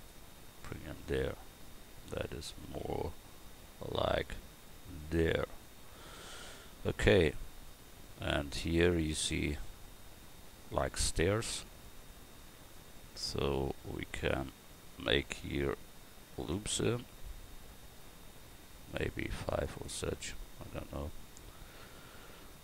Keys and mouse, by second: 1.9 Tab, 2.5 Tab, 2.8 a, 10.5 click, 12.1 Tab, 16.3 ctrl+r.